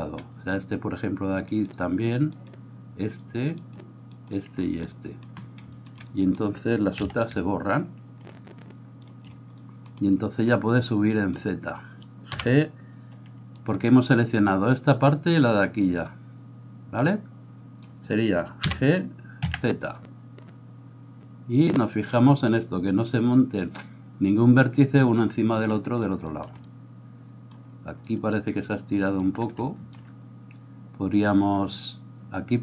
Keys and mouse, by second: 1.5 shift+right click, 1.7 shift+middle click, 2.3 shift+right click, 2.6-3.6 shift+middle drag, 3.6 shift+right click, 3.9 shift+middle click, 4.2 shift+right click, 4.5-32.6 middle drag, 7.0 c, 12.3 g, 18.6 g.